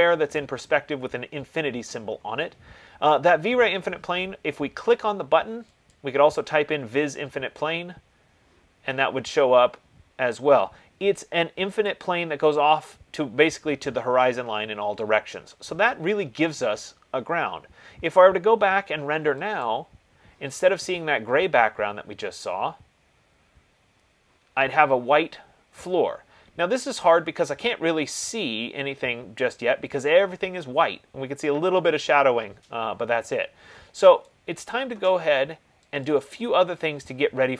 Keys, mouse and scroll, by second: 6.3-11.2 drag, 12.1-17.1 drag, 19.9 click, 34.5 click, 36.3 click.